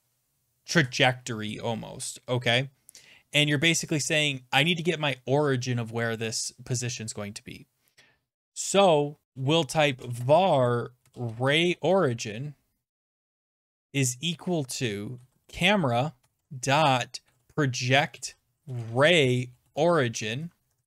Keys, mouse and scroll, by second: 9.0-20.3 typing, 20.6 Down, 20.8 Down.